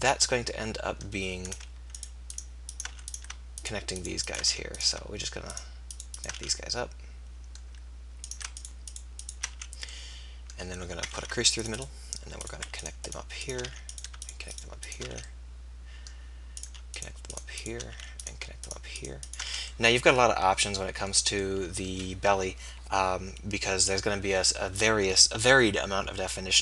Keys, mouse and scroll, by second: 0.8-2.5 middle drag, 2.5 right click, 2.9 f, 4.4 f, 6.4 f, 9.5 f, 11.1 ctrl+r, 13.7 f, 15.3 f, 17.9 f, 19.5 f.